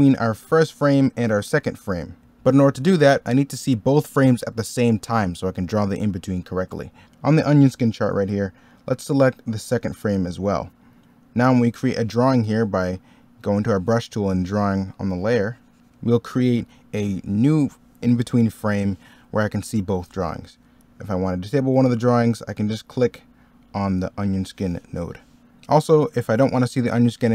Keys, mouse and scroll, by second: 11.2 middle click, 12.3 e, 12.9 b, 15.2 e, 16.9 middle click, 24.8 middle click, 25.9-26.4 scroll down 1, 26.4 middle click.